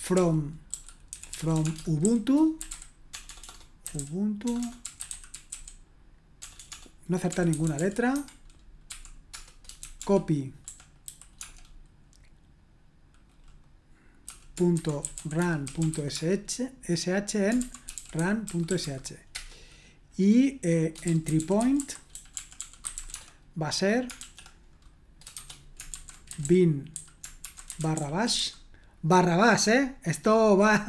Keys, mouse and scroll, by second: 0.0-11.4 typing, 14.0-19.3 typing, 20.8-24.2 typing, 25.3-28.9 typing.